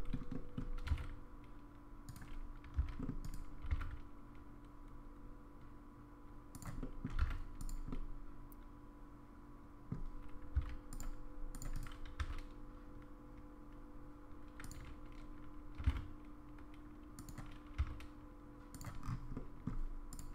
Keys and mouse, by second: 0.3 middle click, 0.8 g, 2.8 c, 3.6 g, 6.8 middle click, 7.2 alt+z, 7.9-9.9 middle drag, 10.5 c, 12.2 s, 15.8 g, 17.8 s, 19.3 middle click.